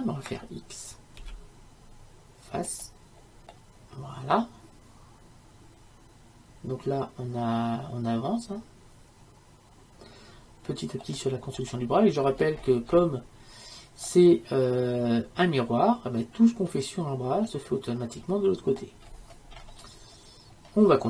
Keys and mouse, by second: 1.2 x, 3.5-5.5 middle drag, 10.9-14.2 middle drag, 14.6-19.0 middle drag, 19.1-21.0 middle drag.